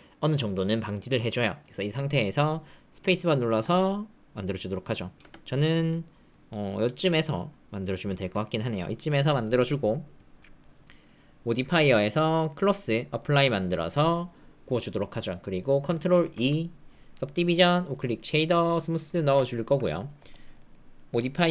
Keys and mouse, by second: 2.4 middle click, 3.3 space, 5.1 space, 5.7 middle click, 6.7-8.7 middle drag, 8.9 shift+middle click, 10.7 middle click, 12.5-13.2 drag, 15.6 middle click, 16.2 ctrl+2, 17.9-18.7 drag, 19.1 shift+middle click, 19.4 ctrl+middle click, 20.6-21.5 drag.